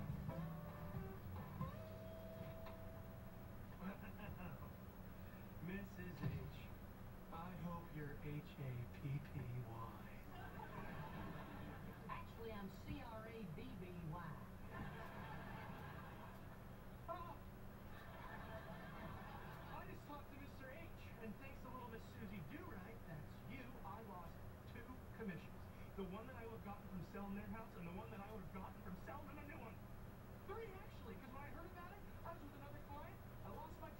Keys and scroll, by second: 3.1 Delete, 3.7 Delete.